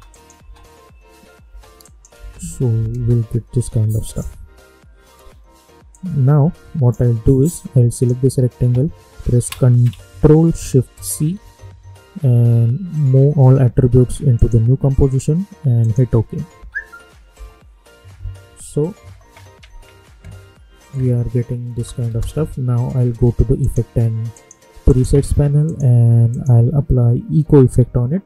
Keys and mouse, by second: 1.8 click, 2.1 space, 4.0-7.9 drag, 11.0 ctrl+shift+c, 14.3 click, 16.5 space, 21.7 space, 23.5 click, 26.7-28.2 typing.